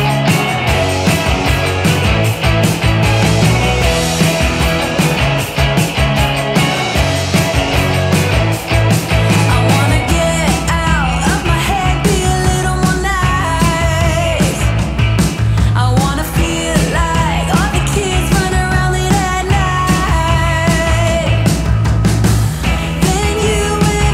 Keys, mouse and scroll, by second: 3.0-4.3 drag, 6.2-9.9 drag, 18.5-19.3 drag.